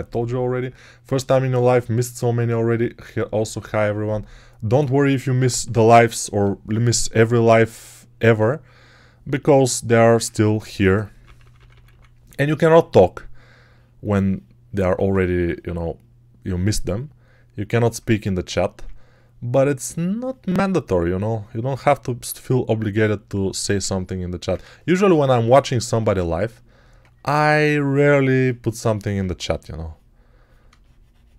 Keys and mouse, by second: 6.9-8.3 ctrl+alt+drag, 10.1-11.7 typing, 14.8 ctrl+z, 29.2 x.